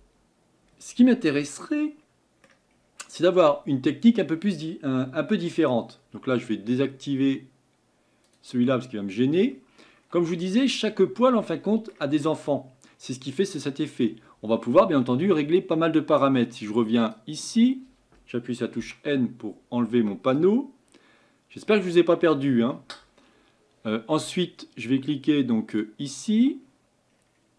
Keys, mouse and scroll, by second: 1.6-2.7 middle drag, 2.7 scroll up 3, 3.7-4.3 scroll down 3, 5.3 scroll down 1, 8.2-8.7 drag, 8.7-9.7 middle drag, 9.7-10.3 scroll up 4, 10.3-11.0 shift+middle drag, 11.0-11.4 scroll up 2, 11.4-18.8 middle drag, 18.8 n, 20.5-27.5 drag.